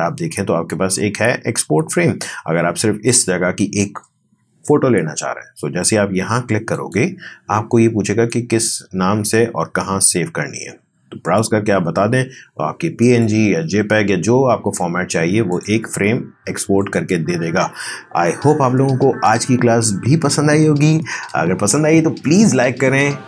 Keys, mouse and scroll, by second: 17.0 click.